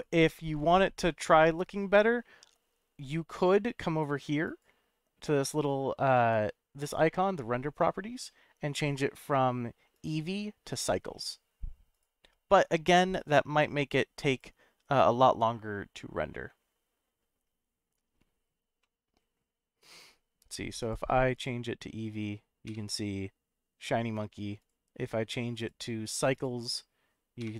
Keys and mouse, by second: 0.0 click, 3.4 click, 4.4 click, 10.1-11.1 drag, 18.8 middle click, 20.8 click, 22.7 F12, 24.7 F12, 25.6-26.4 drag, 27.5 F12.